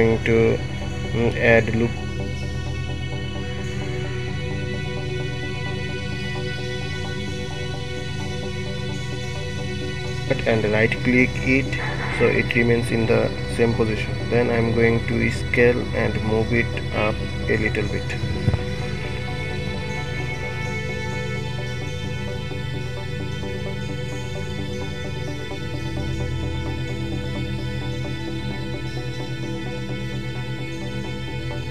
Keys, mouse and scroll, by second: 0.8 ctrl+r, 9.7 alt+click, 13.3 shift+d, 16.2 s, 25.5 g, 29.3-29.8 scroll up 1, 30.8-31.7 shift+middle drag.